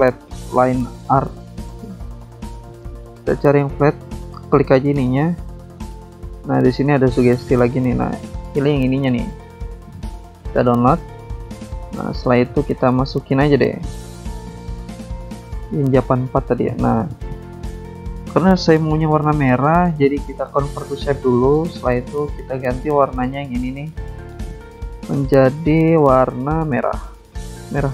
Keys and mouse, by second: 0.3 alt+click, 0.5 alt+click, 1.7 click, 2.2-3.2 typing, 6.7 click, 9.4 click, 9.6 click, 12.9 click, 12.9 click, 14.8 click, 14.8 click, 16.0 click, 18.1 alt+Tab, 18.9 alt+Tab, 19.6 alt+click, 20.6 click, 21.9 click, 22.4 alt+Tab, 25.3 click, 25.4 click, 27.3 click, 27.5 click.